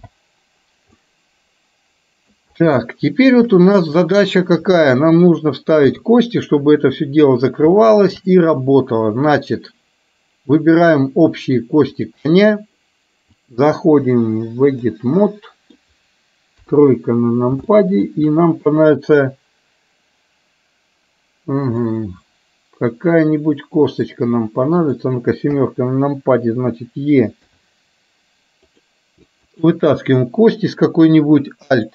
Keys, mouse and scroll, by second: 0.0 n, 1.1-2.4 middle drag, 2.9 shift+middle click, 4.6 KP_2, 5.8 KP_2, 6.4 KP_1, 7.9 shift+middle click, 13.5-14.9 drag, 15.2 middle click, 17.2 KP_3, 17.7 shift+middle click, 22.0-23.0 middle drag, 24.9 click, 25.6 KP_7, 27.5 e, 29.6 click.